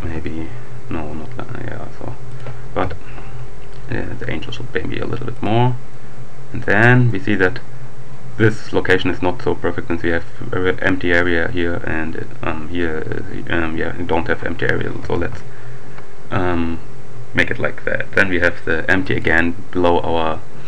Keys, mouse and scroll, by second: 0.0 z, 2.3 click, 2.8 KP_7, 3.9 g, 5.4 click, 7.0 click, 14.8 g, 15.0 z, 19.0 click.